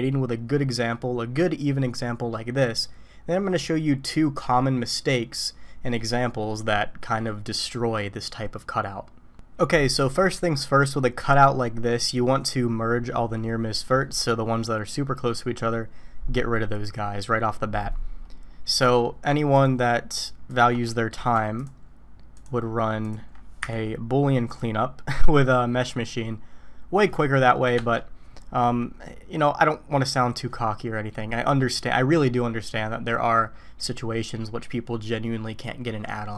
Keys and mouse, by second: 18.7 right click, 20.9 shift+middle click, 22.4 ctrl+click, 23.6 y.